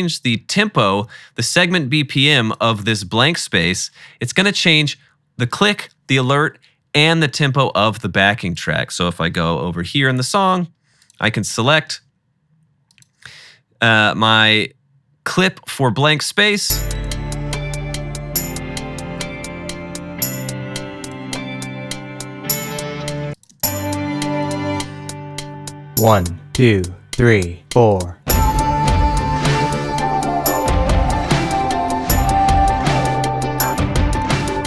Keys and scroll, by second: 9.8 =, 11.1 typing, 16.6 space, 23.2 space, 23.6 space, 24.5 =, 24.6 =.